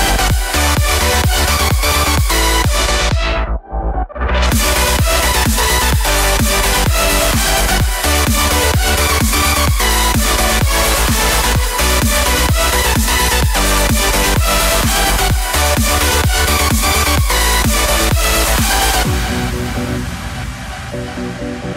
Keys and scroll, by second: 6.6 i, 7.5 alt+i, 21.3 3.